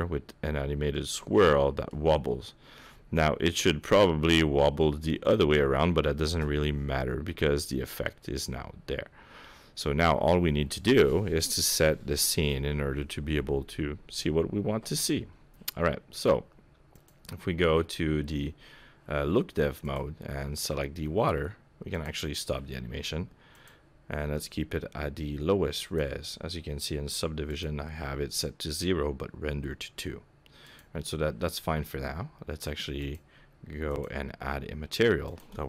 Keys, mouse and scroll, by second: 6.3 KP_0, 7.6-9.3 scroll down 2, 17.0 click, 19.8 click, 22.0 click, 23.6 click, 25.8 click, 27.5 click, 30.7 click, 33.0 click, 33.9 click, 35.3 click.